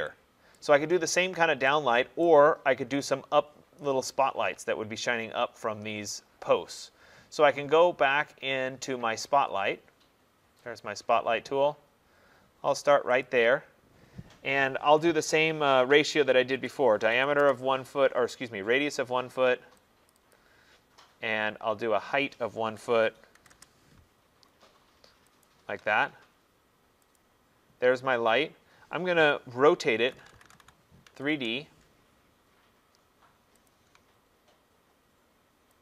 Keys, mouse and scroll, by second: 0.6 right click, 2.3 right click, 2.7 scroll, 2.7 middle click, 3.0 middle click, 10.8 click, 11.8 middle click, 11.9 middle click, 13.0 middle click, 13.3 click, 16.6-17.4 typing, 20.1 click, 20.4 click, 21.6 middle click, 21.7 middle click, 22.7-23.4 typing, 23.5 Return, 25.5 shift+right click, 27.2 click, 30.0-31.1 typing, 31.4 Return, 33.7 click.